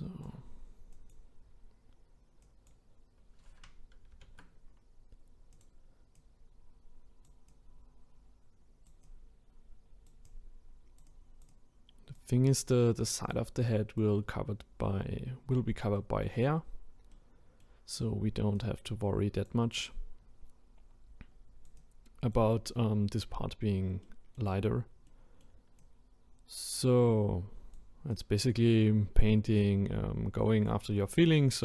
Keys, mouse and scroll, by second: 4.1 ctrl+z, 5.5-15.9 drag, 15.9-16.7 middle drag, 16.7-17.1 scroll down 1, 17.1-17.9 middle drag, 17.9-18.6 scroll up 1, 18.6-24.0 drag, 24.0-25.8 middle drag, 25.8-30.9 drag, 30.9-31.6 middle drag.